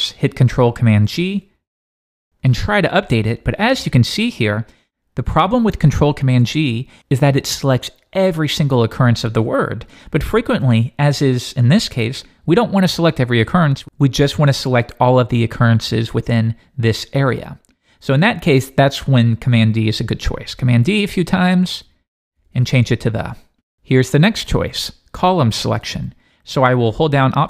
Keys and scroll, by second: 1.1 Left, 1.6 ctrl+super+g, 20.9 super+d.